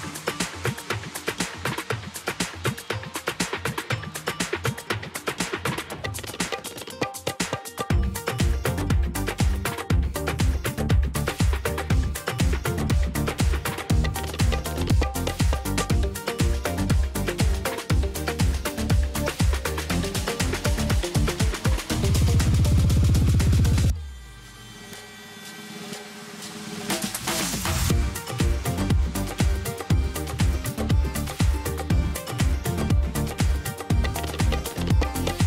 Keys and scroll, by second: 0.2 space, 0.4 ctrl+alt+z, 4.7 ctrl+space, 4.9 ctrl+space, 5.2 v, 5.8 space, 8.5 v, 11.9 v, 32.1 space, 32.3 F9, 32.7 ctrl+space, 32.9 ctrl+space, 34.5 space.